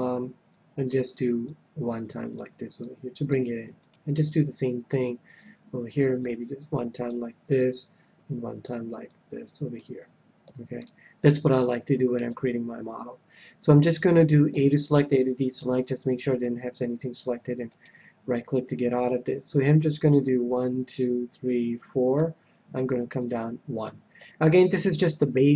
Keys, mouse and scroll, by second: 0.4 KP_1, 1.3-3.0 drag, 2.8-4.5 middle drag, 3.7-5.4 right drag, 4.8 KP_3, 6.1-7.9 drag, 7.5 KP_1, 9.2-10.8 drag, 10.4 a, 10.8-12.4 middle drag, 12.2 KP_3, 14.5 a, 14.9 a, 15.5 c, 17.7-19.5 right drag, 20.1-21.8 drag, 23.1-24.8 drag, 24.2 a, 25.0-25.5 middle drag.